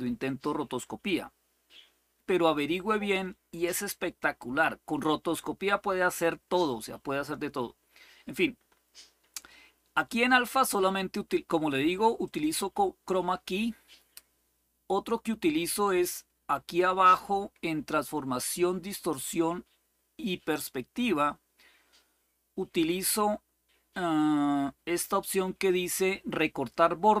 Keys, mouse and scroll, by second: 0.0-4.2 drag, 7.0-8.4 scroll up 2, 8.4-11.0 scroll up 1, 12.0 click, 15.6-16.4 scroll down 2, 16.4-18.9 scroll down 1, 18.9 click, 21.5-22.1 scroll down 2, 22.1-22.8 scroll down 1, 22.8-23.4 scroll down 1, 23.4-24.1 scroll down 1, 24.1-24.7 scroll down 1, 24.7-27.2 scroll down 1.